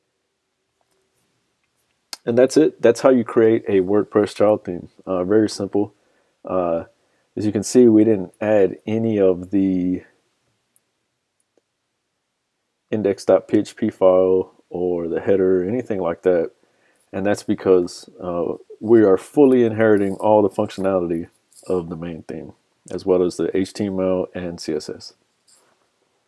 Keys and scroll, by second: 4.4 super+Tab, 18.4 super+Tab.